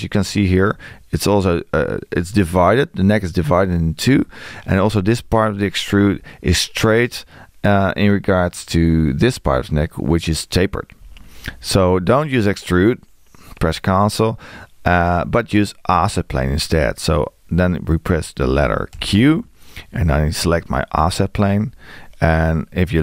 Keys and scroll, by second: 18.9 q.